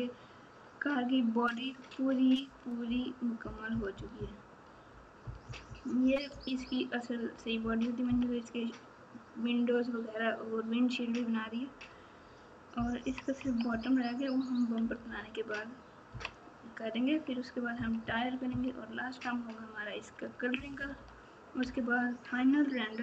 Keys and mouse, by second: 2.8 KP_4, 3.4-7.4 KP_4, 7.6 KP_4, 13.0 KP_6, 13.4 KP_2, 18.0 KP_6, 20.5 ctrl+KP_4, 21.6 ctrl+KP_2.